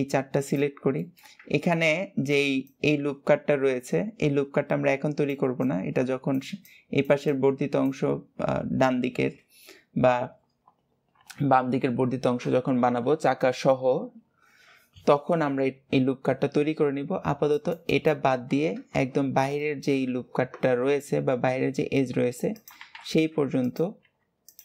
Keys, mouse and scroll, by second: 0.2 shift+click, 0.8-18.1 shift+middle drag, 19.1-19.4 scroll up 1, 19.4-20.6 shift+middle drag, 22.9-23.4 scroll up 2, 23.4 click.